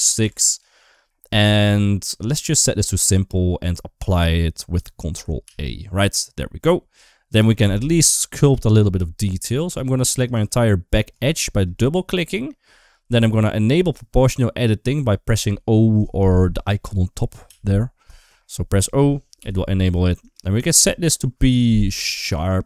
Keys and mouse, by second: 2.6 click, 5.3 ctrl+a, 6.9 Tab, 7.4 Tab, 7.8 Tab, 9.2 2, 10.0 click, 10.2 click, 11.1 shift+middle click, 17.3 o, 19.2 o, 20.1-22.6 drag.